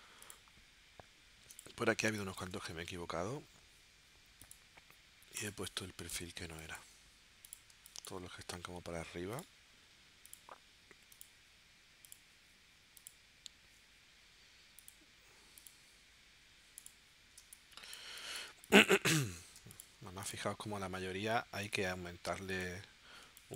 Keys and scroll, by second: 2.1 space, 6.4 space, 7.7 space, 17.4 space, 19.5 space, 23.2 space.